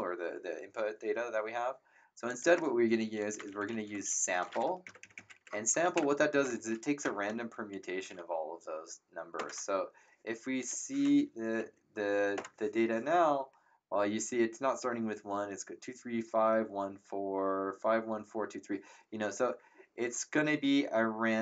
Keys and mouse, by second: 2.2 click, 3.1-4.6 typing, 4.8 ctrl+Right, 5.8 ctrl+Left, 7.0 shift+0, 9.3 ctrl+Return, 10.6 click, 11.2 Up, 12.3 Return, 12.3 KP_Enter.